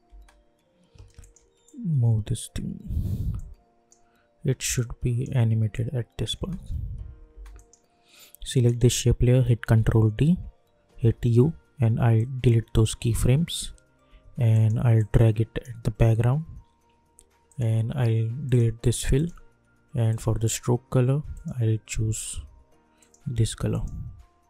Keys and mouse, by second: 1.2-6.4 shift+drag, 6.4 space, 7.5 click, 9.7 ctrl+d, 10.9 u, 12.1-24.4 drag.